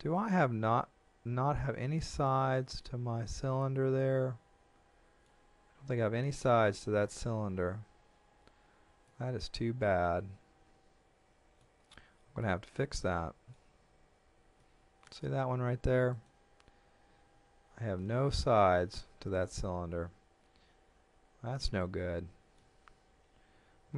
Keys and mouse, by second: 9.1 middle click, 12.4 shift+middle click, 13.7 z, 14.6 middle click, 16.1 right click, 17.3 Tab, 19.9 Tab, 21.8 middle click, 22.9 Tab.